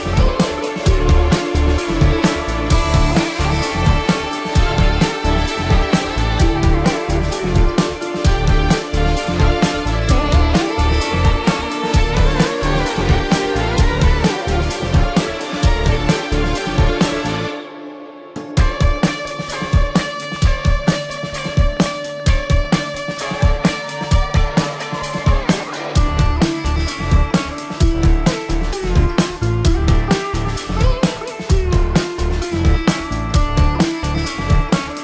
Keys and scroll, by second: 2.0 ctrl+alt+z, 2.9 ctrl+alt+z, 3.8 ctrl+alt+z, 6.9 space, 7.8 ctrl+alt+z, 9.2 ctrl+alt+z, 9.8 ctrl+-, 12.1 ctrl+=, 20.9 ctrl+=, 31.2 ctrl+=, 31.4 space.